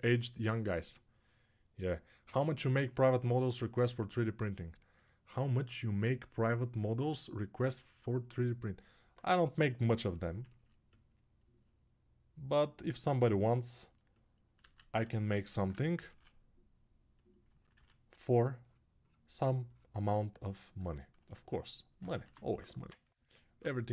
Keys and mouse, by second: 14.4 alt+q, 15.8 shift+r, 17.4-23.9 drag, 17.9 shift+r, 22.6 [.